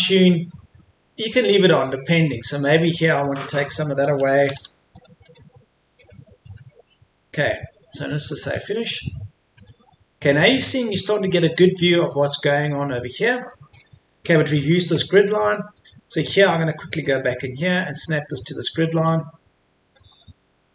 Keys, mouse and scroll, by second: 3.9 Escape, 5.0 click, 6.8 Escape, 8.3 click, 11.7-12.0 scroll up 1, 13.4-13.8 scroll up 1, 14.4-14.8 scroll down 1, 15.4-16.0 scroll up 1, 17.0-20.4 drag.